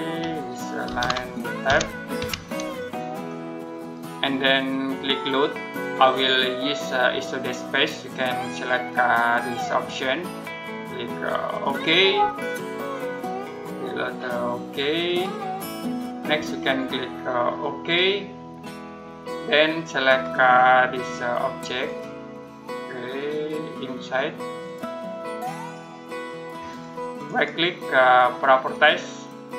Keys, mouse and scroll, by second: 0.7-2.0 typing, 3.6 click, 9.1 click, 14.9 click, 27.1 right click, 28.5 click.